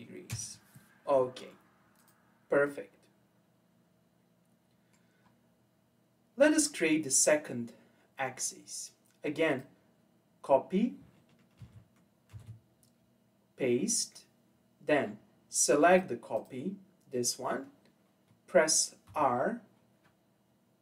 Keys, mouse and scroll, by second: 2.0 click, 2.7-5.2 middle drag, 5.2-5.8 scroll up 2, 5.8-6.6 scroll down 1, 6.6-9.5 middle drag, 9.5 click, 11.6 ctrl+c, 12.3 ctrl+v, 15.9 click, 16.3 click, 19.1 r.